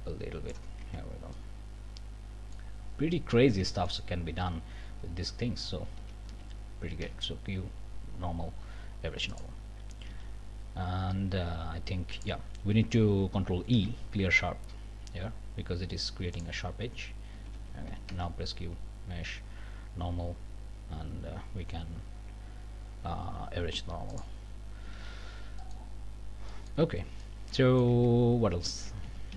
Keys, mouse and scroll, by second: 0.8 Tab, 1.1 scroll down 1, 1.3-2.7 drag, 2.8 scroll up 1, 3.1 click, 3.5 Tab, 3.8 middle click, 4.0 click, 5.6 ctrl+a, 7.0 q, 9.3 click, 10.1 alt+a, 10.5 scroll down 2, 11.1-11.5 scroll up 2, 12.1 click, 13.7 ctrl+e, 16.3 click, 17.3 a, 18.1 q, 24.1 click, 24.5 scroll down 2, 25.0 alt+a, 25.2 alt+scroll up 2, 25.6 click, 26.1 scroll down 2, 26.5-28.0 scroll up 2, 26.8 Tab, 27.9 Tab, 29.0 ctrl+alt+Up.